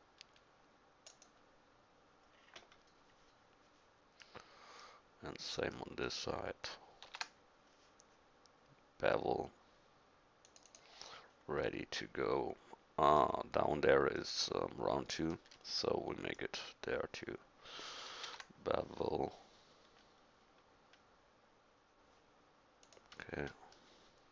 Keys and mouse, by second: 7.1 ctrl+b, 10.7 click, 17.2 middle click, 18.2 ctrl+b.